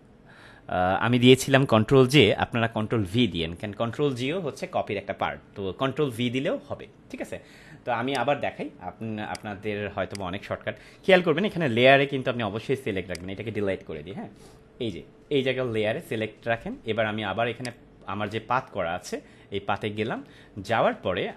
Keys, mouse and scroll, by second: 8.0 click, 13.1 click, 13.9 Delete, 17.5 click.